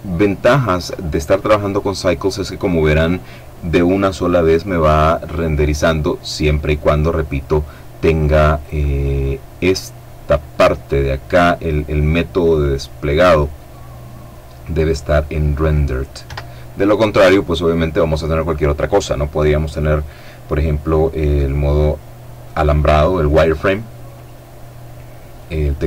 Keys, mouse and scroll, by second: 11.7 click, 15.4 Escape, 18.9 click, 20.3 click, 23.3 click, 24.7 click.